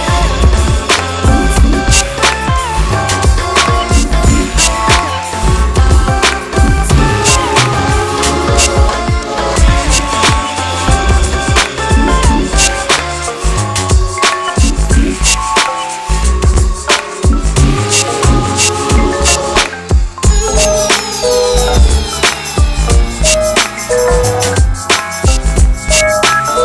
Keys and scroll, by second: 15.9 ctrl+z, 19.6 KP_Add.